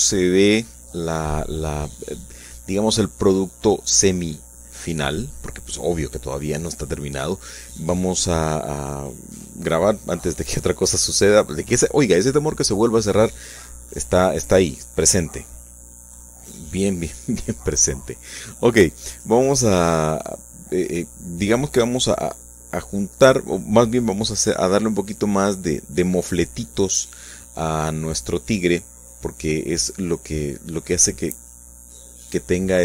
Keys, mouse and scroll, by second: 8.0 shift+click, 8.7 middle click, 10.0 ctrl+shift+s, 10.2 ctrl+click, 11.4 click, 12.4 shift+click, 13.0 shift+click, 14.5 shift+click, 15.7 shift+click, 16.9 click, 18.5 click, 19.6 f, 20.5 click, 20.8 middle click, 21.3 shift+click, 23.3 g, 25.6 shift+click, 27.2-28.4 drag, 29.5-30.5 drag, 30.7 click, 31.7 click, 32.7 click.